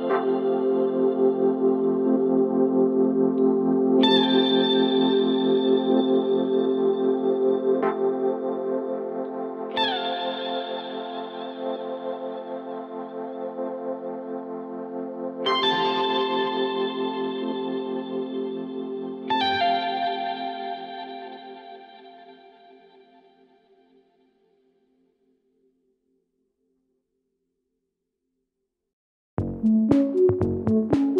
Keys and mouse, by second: 13.0-15.8 middle drag, 22.2-23.0 shift+middle drag, 24.6 shift+q, 25.4 click, 29.7 middle click.